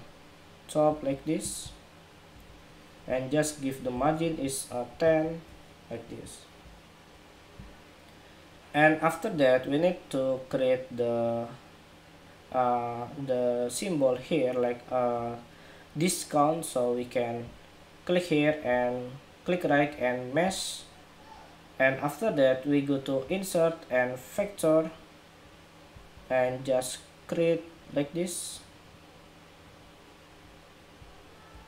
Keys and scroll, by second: 4.7 alt+shift+Right.